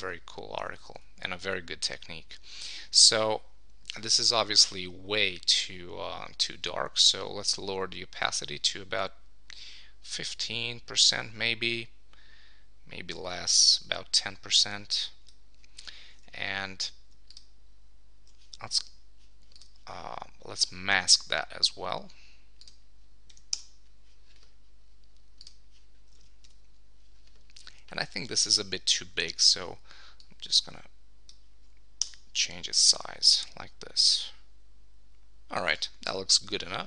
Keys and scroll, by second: 0.2 super+d, 0.7 super+1, 16.3 super+s, 23.5 Return, 26.3 super+s, 29.3 super+t, 31.7 super+t, 32.0 Return.